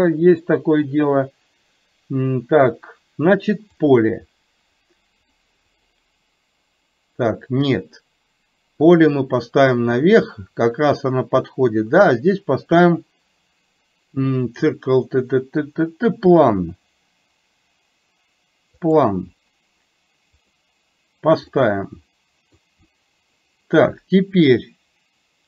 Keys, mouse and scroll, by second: 5.3 click, 5.8 click, 9.1-19.1 drag, 20.4 click, 21.6-22.7 middle drag.